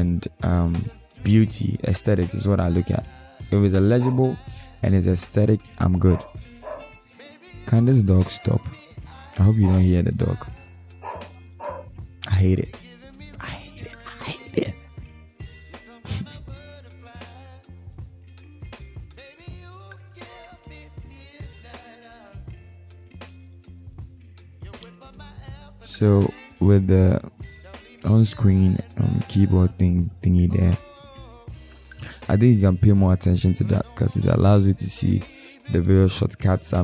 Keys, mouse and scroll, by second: 4.3 ctrl+alt+scroll up 1, 10.3 ctrl+z, 10.7 shift+click, 12.6 Up, 15.1 Down, 15.4 Down, 15.6 Down, 16.0 Down, 16.6 Return, 18.9 ctrl+alt+scroll down 1, 21.9 alt+click.